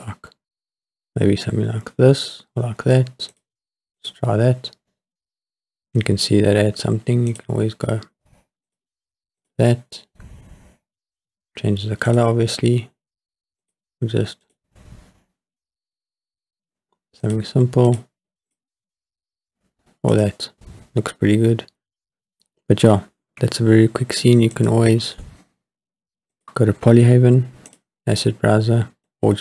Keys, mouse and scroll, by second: 4.0 click, 7.3-8.7 drag, 9.4 click, 12.1-13.7 drag, 14.4 click, 17.2-18.0 drag, 18.5-20.3 drag, 22.3 click, 25.0 click, 27.7 click, 29.0 click.